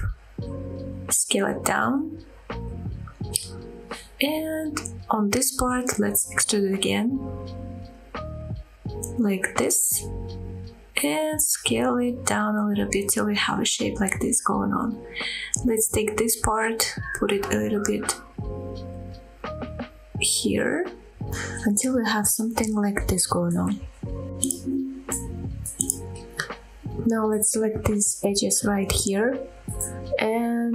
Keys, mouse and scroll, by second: 0.7 right click, 1.2-1.6 scroll up 2, 1.9 shift+middle click, 2.3 s, 4.9 click, 5.2 scroll down 1, 5.6 shift+middle click, 6.1 click, 7.9 e, 9.3 y, 12.7 click, 13.6 s, 15.7 shift+middle click, 15.7 scroll down 1, 15.9 click, 17.2 g, 17.6 y, 20.2 click, 20.5 scroll up 2, 21.0 shift+middle click, 21.6 scroll down 1, 22.0 middle click, 22.9-23.3 scroll up 2, 23.4 shift+middle click, 23.9-24.3 scroll down 2, 24.3 middle click, 25.2 click, 26.4 click, 27.5-27.9 scroll up 2, 27.9 middle click, 29.1 g, 29.5 z.